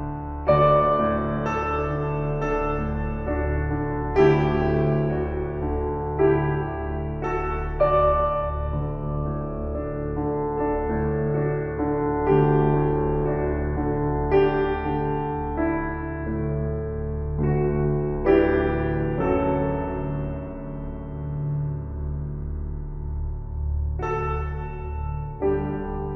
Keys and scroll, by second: 22.4 Right.